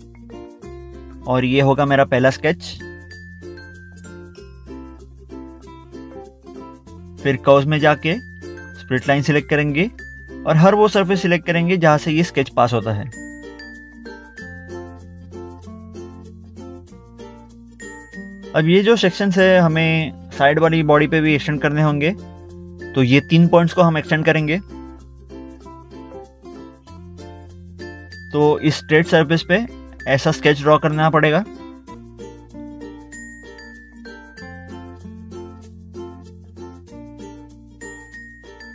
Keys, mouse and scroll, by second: 0.4 scroll down 1, 4.2 scroll down 1, 4.9 middle click, 5.7 middle click, 5.9 scroll down 1, 7.2 scroll up 1, 7.7 middle click, 8.4 middle click, 8.7 scroll up 1, 9.4 middle click, 10.1 middle click, 11.1 scroll down 1, 12.7 click, 15.8 middle click, 16.3 middle click, 17.7 middle click, 17.9 scroll up 1, 18.0 scroll down 1, 21.3 scroll up 1, 21.9 scroll down 1, 23.4 scroll up 1, 24.1 middle click, 24.6 middle click, 24.8 scroll up 1, 25.0 scroll down 1, 25.5 scroll up 1, 25.5 middle click, 26.8 click, 29.2 scroll down 1, 29.8 middle click, 30.3 middle click, 33.5 scroll down 1, 37.8 ctrl+8.